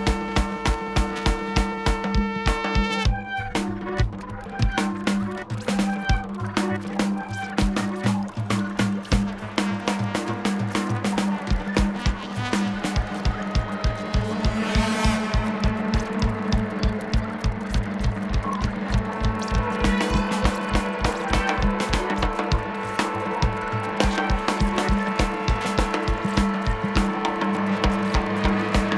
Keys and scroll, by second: 9.0 super+=, 16.9 super+=.